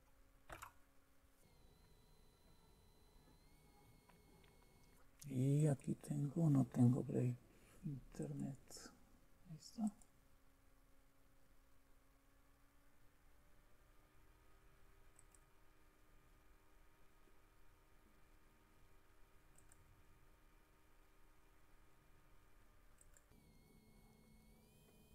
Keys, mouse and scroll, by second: 0.5 Return, 5.5-7.6 drag, 8.2-10.9 drag, 15.1-16.6 drag, 19.6-20.6 drag, 23.0 click, 23.5 click, 23.9 click, 24.5 click.